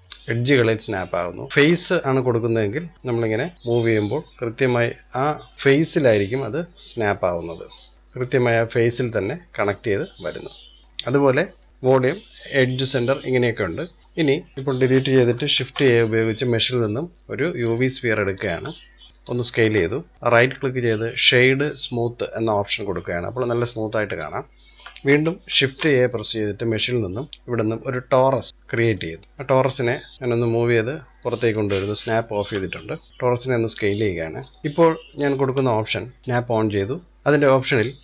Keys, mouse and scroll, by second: 1.5-3.1 drag, 3.4 click, 5.5 middle click, 6.2 click, 7.9 click, 8.0-9.3 middle drag, 9.3 click, 11.5-13.8 drag, 14.0 click, 14.3 scroll down 1, 14.5 Delete, 15.7 shift+a, 18.4-18.8 scroll up 2, 18.8 shift+middle drag, 19.1 scroll down 4, 19.3-20.3 shift+middle drag, 20.3-23.3 right drag, 23.8-25.6 middle drag, 25.6 shift+a, 29.2 middle click, 30.1 click, 30.7 click, 31.7-32.1 scroll up 2, 32.1-33.1 shift+middle drag, 33.1 s, 34.1-34.9 middle drag, 34.9-35.3 scroll up 1, 35.3-36.2 shift+middle drag, 36.2 click, 37.2-38.0 drag.